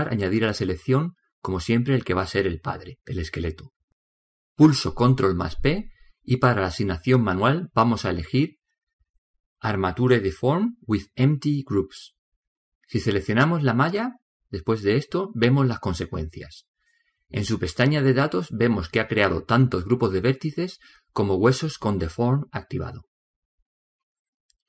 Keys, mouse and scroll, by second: 3.6 right click, 13.8 right click, 19.3-22.3 drag, 22.7-24.5 drag.